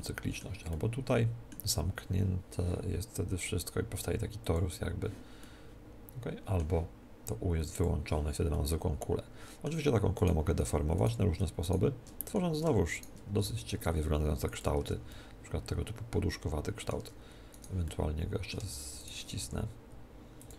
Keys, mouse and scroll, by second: 4.4-6.4 drag, 5.4-7.7 middle drag, 7.7-9.6 drag, 8.5-10.1 middle drag, 10.1-14.7 right drag, 10.3 middle click, 12.2-13.3 drag, 12.2-14.2 middle drag, 13.3 s, 14.7 click, 14.7 middle click, 14.9 Tab, 15.0-17.0 middle drag, 17.0 Tab, 17.5 right click, 17.8-19.6 middle drag, 19.0 right click, 19.4 s, 19.4-20.5 right drag, 20.4-20.5 drag.